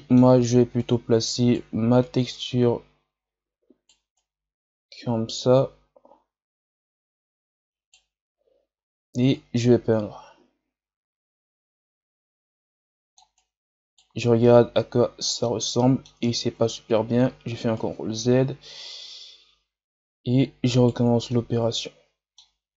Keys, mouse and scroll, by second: 0.7-7.2 right drag, 9.3-12.3 drag, 13.3-14.3 right drag, 14.3-16.4 middle drag, 16.4 ctrl+z, 17.7-20.8 right drag, 21.3-22.7 middle drag.